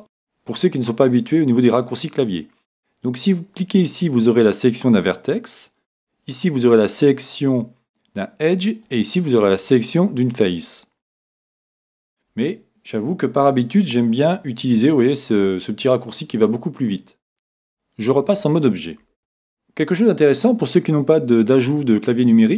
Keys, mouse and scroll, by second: 5.9-7.7 drag, 8.8-10.7 drag, 13.9 ctrl+Tab, 18.1 Tab, 19.2 middle click.